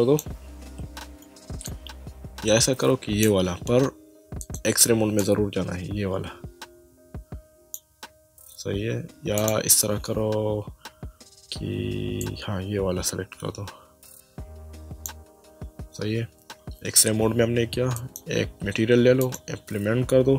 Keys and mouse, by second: 1.6 click, 4.4 click, 9.4 click, 12.2 click, 18.0 click, 19.2 click.